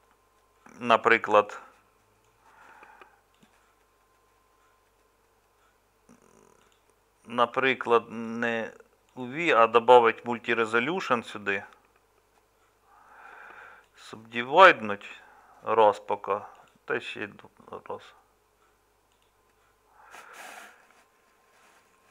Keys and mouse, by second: 1.2-22.1 middle drag.